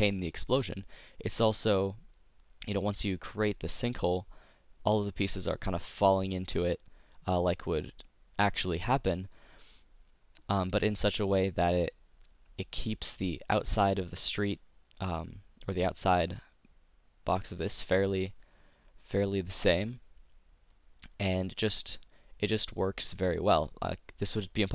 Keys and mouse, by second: 1.6-2.6 drag, 3.2 click, 8.8 middle click, 22.8 middle click, 23.0-24.6 drag.